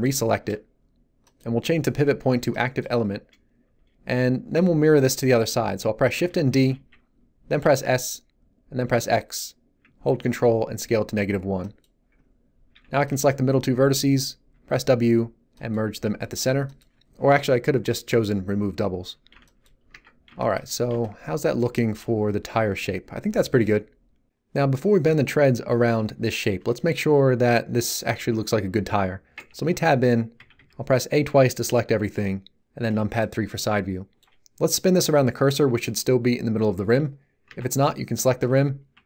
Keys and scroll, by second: 6.5 shift+d, 7.6 s, 8.8 x, 12.7 a, 12.9 b, 14.5 w, 19.9 Tab, 29.3 Tab, 30.3 a, 32.1 3, 37.4 Tab, 38.9 shift+s.